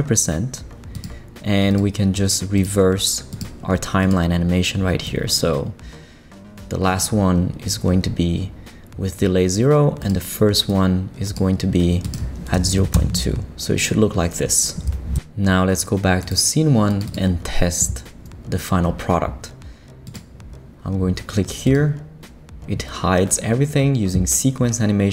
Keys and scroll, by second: 12.5 BackSpace, 12.8 2, 12.9 Return.